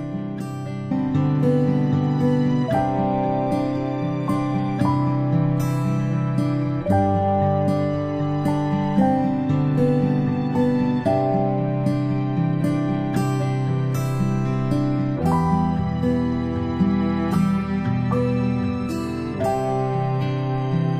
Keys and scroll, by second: 1.9-2.3 space, 4.6 ctrl+z, 5.2 space, 5.4 space, 7.1 space, 7.4 space, 8.3 space, 18.8 ctrl+z, 20.8 space.